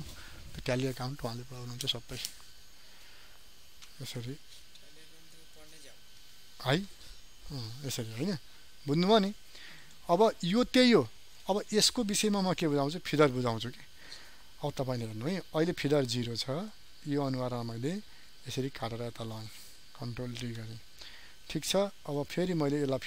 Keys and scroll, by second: 5.1 ctrl+h, 20.1 ctrl+d.